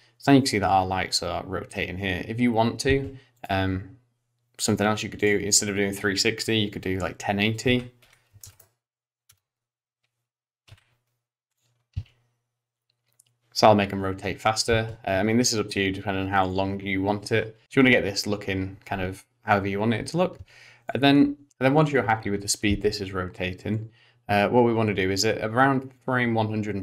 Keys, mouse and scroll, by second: 2.9 space, 3.4 click, 5.2 click, 7.7 r, 10.7 i, 12.0 space, 14.7 space, 16.4 click, 20.4 space, 20.9 click, 21.5 click, 22.7 space, 23.8 click.